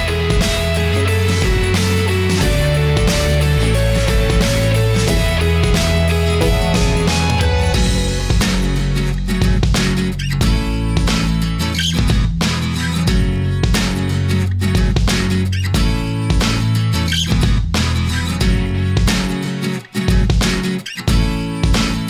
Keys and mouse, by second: 4.5 click, 5.5 middle click, 7.3-10.1 drag, 11.3 click, 13.3 Delete, 13.8-14.4 right drag, 15.4-16.3 drag, 16.3 middle click, 17.5 click, 18.3 middle click, 19.3 Delete, 20.5-22.0 middle drag.